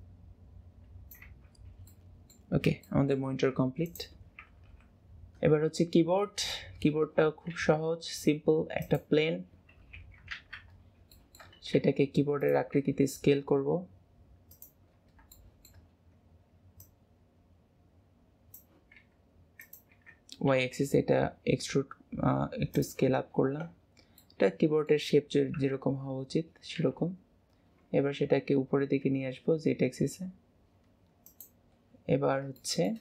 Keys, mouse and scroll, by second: 1.9-2.5 middle drag, 2.5-2.9 scroll down 2, 2.9-3.9 shift+middle drag, 3.9 click, 4.7 KP_Decimal, 5.7-6.0 scroll down 4, 6.2-7.5 middle drag, 10.1 KP_7, 10.4 alt+z, 11.2-11.8 shift+middle drag, 11.8 g, 15.4-16.0 middle drag, 16.9 click, 23.9-24.3 scroll, 24.3-24.9 middle drag, 25.7 KP_1, 27.7-28.2 scroll down 4, 28.2 g, 31.9-32.7 scroll up 8, 32.7 shift+middle click.